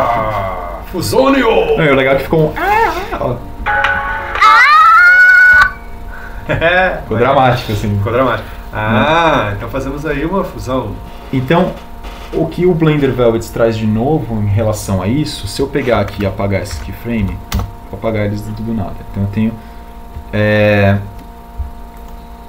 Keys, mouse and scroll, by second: 16.4 a, 17.8 Delete, 22.2 click.